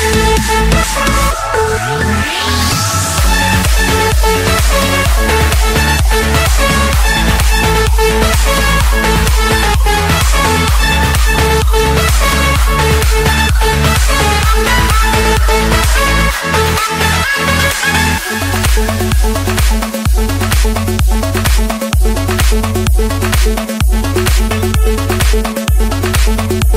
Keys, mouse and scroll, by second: 0.1 scroll up 1, 0.5 Escape, 4.7 click, 8.5 F8, 10.9-13.6 typing, 11.1 Return, 16.6 BackSpace, 17.6 4, 18.9 Return, 20.0-20.7 scroll, 20.7 Escape, 21.8 click, 23.6 click, 23.8-24.5 scroll, 24.5-25.5 scroll, 25.5 click, 26.4 Escape.